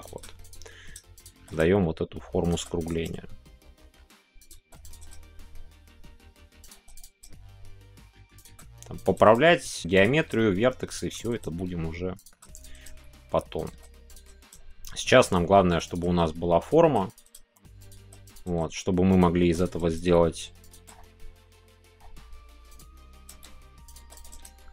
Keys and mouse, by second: 0.0 click, 1.5 g, 3.0 g, 5.2 shift+g, 7.2 g, 8.4 shift+click, 9.3 g, 10.3 shift+g, 10.9 shift+click, 11.4 g, 12.1 click, 12.8 g, 13.5 click, 14.1 click, 14.4 g, 15.2 click, 15.9 click, 16.6 shift+click, 18.3 click, 19.1 click, 19.6 click, 19.9 g, 20.7 click, 23.8 click, 24.3 g.